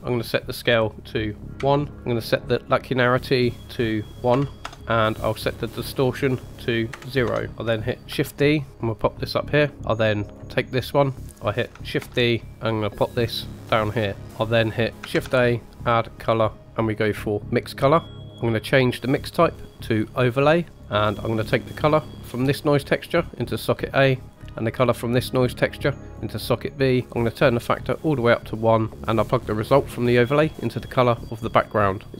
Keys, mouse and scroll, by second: 0.1-2.1 drag, 3.1-4.6 drag, 5.6-7.2 drag, 7.5 middle click, 8.0 shift+d, 10.2 click, 11.0 middle click, 11.9 shift+d, 15.1 shift+a, 19.1-20.7 drag, 20.8 middle click, 22.1-23.5 drag, 24.7-26.2 drag, 27.0 click, 28.9 click, 29.5-30.8 drag.